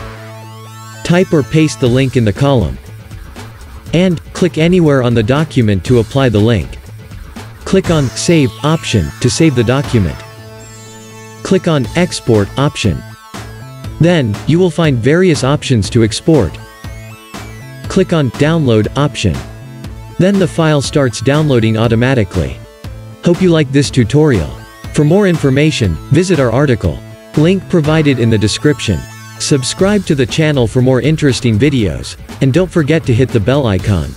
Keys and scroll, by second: 0.9-3.4 typing, 3.6 Return.